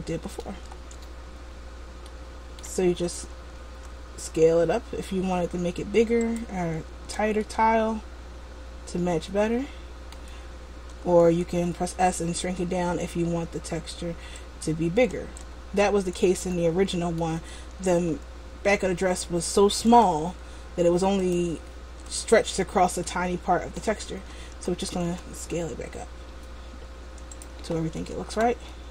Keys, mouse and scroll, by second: 0.9 Tab, 2.2 middle click, 3.9 s, 7.1 Tab, 7.5 middle click, 10.9 Tab, 12.1 s, 15.4 Tab, 15.9 middle click, 17.8 Tab, 20.3 s, 21.9 Tab, 23.2 middle click, 24.3 Tab, 25.3 s, 28.1 Tab, 28.8 middle click.